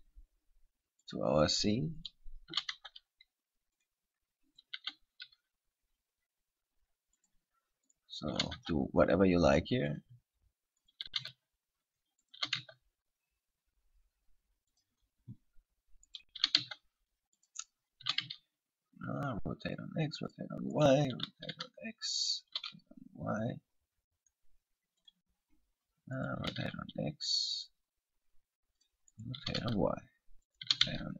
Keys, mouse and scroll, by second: 1.3 click, 2.2 right click, 2.7 r, 4.1 click, 4.7 right click, 4.9 r, 7.5 click, 8.1 right click, 8.5 r, 10.2 click, 11.0 right click, 11.3 r, 12.5 click, 12.5 r, 15.0 click, 16.3 right click, 16.6 r, 17.7 click, 18.2 r, 20.5 click, 20.9 right click, 21.3 r, 22.6 click, 22.7 r, 25.3 click, 26.3 right click, 26.6 r, 29.0 click, 29.3 right click, 29.6 r, 30.8 click, 31.0 r.